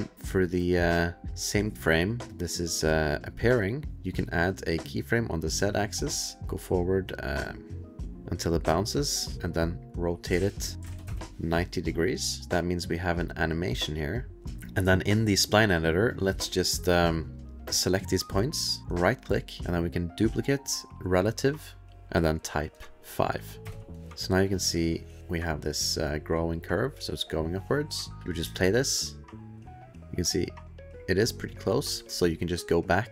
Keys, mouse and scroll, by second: 5.1 click, 6.4 click, 10.1 click, 10.3 ctrl+a, 10.8 KP_9, 11.0 KP_Enter, 11.0 KP_0, 12.4 click, 13.5 click, 14.8 click, 16.1 click, 16.4 click, 18.9 click, 22.1 click, 22.1 KP_5, 23.6 KP_Enter, 24.3 click, 24.4 click, 25.4 click, 28.4 space, 30.5 middle click, 30.5 click, 32.1 middle click, 32.1 click, 32.1 click.